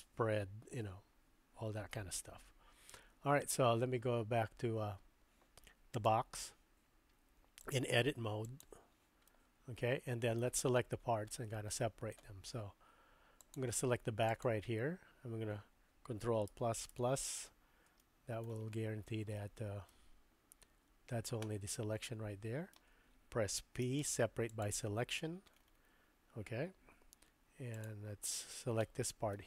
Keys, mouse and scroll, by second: 7.7-8.7 drag, 9.3-10.4 middle drag, 11.3 shift+middle click, 13.4 click, 14.4 click, 16.5 ctrl+KP_Add, 17.2 ctrl+KP_Add, 18.0 shift+middle click, 19.4 middle click, 22.1 shift+middle click, 22.6 shift+click, 23.8 p, 28.9 middle click.